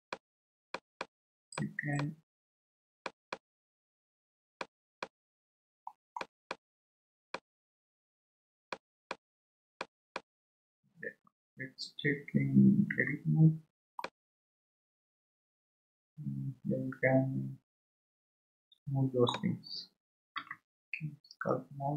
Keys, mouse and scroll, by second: 0.1-5.0 drag, 5.0-6.5 middle drag, 6.5-12.9 drag, 14.0 Tab, 14.0-17.0 middle drag.